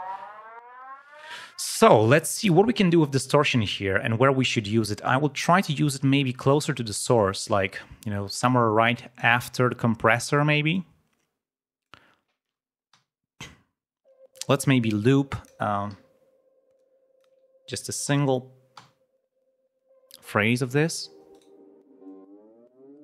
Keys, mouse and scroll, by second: 1.2 click, 2.0 space, 2.3 right click, 7.2 click, 8.8 click, 10.6-12.0 drag, 12.8 l, 14.3 space, 14.4 click, 15.2 click, 15.8 r, 16.7 click, 18.7 l, 21.2 scroll up 1, 22.0-23.0 drag.